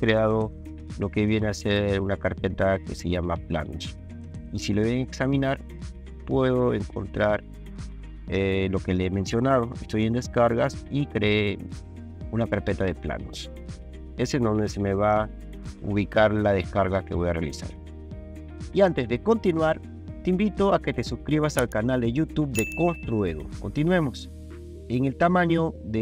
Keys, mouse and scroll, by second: 3.5 click, 5.5 drag, 7.2 click, 13.5 click, 13.6 click, 17.5 click.